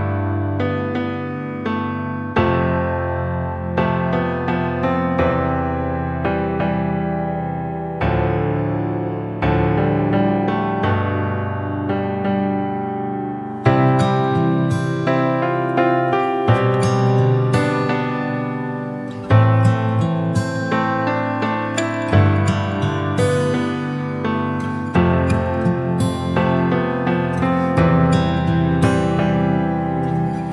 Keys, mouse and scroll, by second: 0.4 KP_3, 1.4 r, 4.0 click, 5.0 s, 6.7-7.1 scroll down 1, 7.1 s, 9.2 scroll down 1, 9.4-10.0 middle drag, 10.0 KP_7, 10.5-11.3 scroll up 2, 11.3 s, 14.6 KP_3, 15.2-15.7 scroll down 3, 15.7 s, 19.2 click, 20.6 scroll up 1, 21.5-21.9 scroll down 1, 22.1-22.9 middle drag, 22.9 KP_3, 23.3 scroll up 2, 24.1 r, 25.4-25.8 scroll down 1, 25.8-26.2 scroll up 1, 26.2 g, 29.1-30.1 shift+right drag, 30.1-30.5 drag.